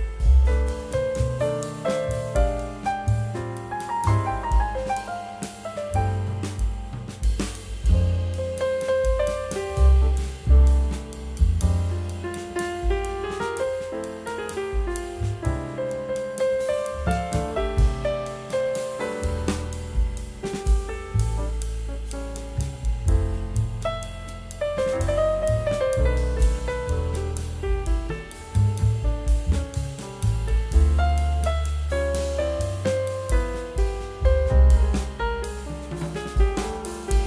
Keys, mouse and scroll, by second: 15.6 right click, 16.6 double click, 20.9-22.3 scroll down 1, 28.0-29.7 scroll down 1.